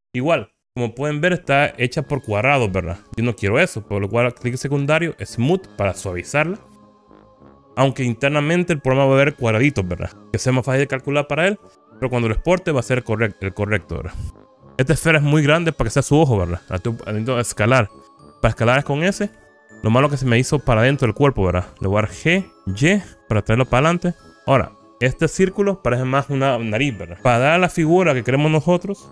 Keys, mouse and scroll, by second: 1.0-1.6 scroll up 4, 1.9 scroll down 1, 3.1-3.9 scroll down 2, 4.2-5.5 right drag, 14.5-15.0 scroll down 3, 15.4-16.8 middle drag, 16.8 middle click, 19.3 s, 19.9 click, 20.3 middle click, 22.4 g, 23.3 y, 24.3 click, 24.7-27.2 middle drag, 27.2 scroll up 3.